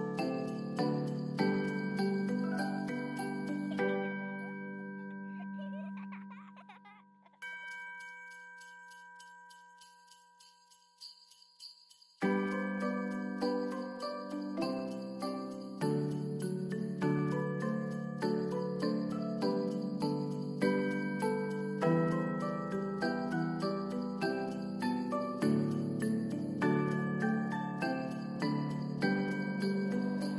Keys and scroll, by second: 4.5 F9, 5.2 ctrl+s, 7.9 1, 8.8 Return, 10.5 ctrl+s, 13.5 0, 16.2 ctrl+s, 25.5 space, 27.7 space.